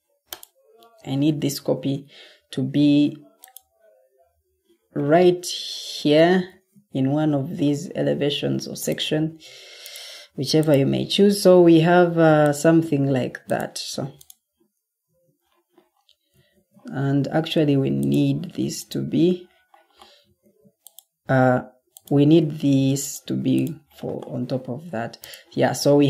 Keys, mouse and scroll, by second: 1.2 ctrl+c, 6.4 ctrl+v, 11.2 ctrl+d, 15.0 Escape, 16.4 ctrl+d, 20.3 ctrl+d.